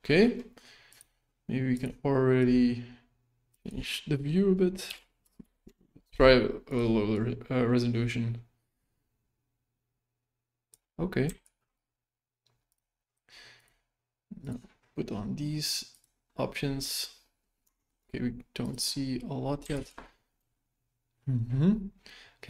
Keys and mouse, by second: 2.4-3.5 drag, 3.6-6.8 drag, 7.2-10.8 drag, 11.4 ctrl+s, 13.6 drag, 14.4 click, 17.7 shift+middle click, 18.6 click, 19.7 ctrl+s.